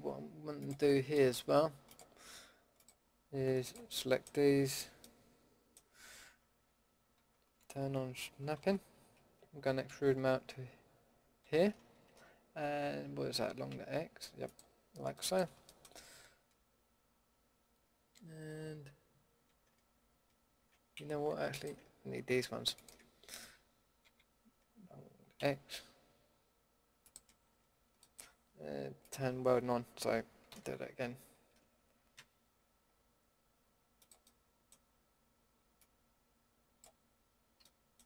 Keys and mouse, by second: 4.0-5.1 middle drag, 5.6-7.1 drag, 7.1 shift+Tab, 8.2 shift+Tab, 8.5 shift+Tab, 9.9 e, 15.1-20.9 middle drag, 20.9 ctrl+z, 21.5-22.7 drag, 24.0 e, 24.6 click, 27.8 ctrl+z, 29.0-30.5 drag, 30.5 e, 35.7-36.8 drag.